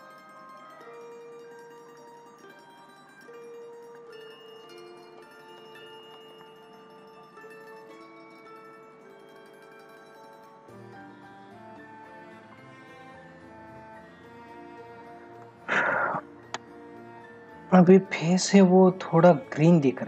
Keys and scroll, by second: 13.5 ctrl+=, 15.4 space, 17.4 ctrl+-.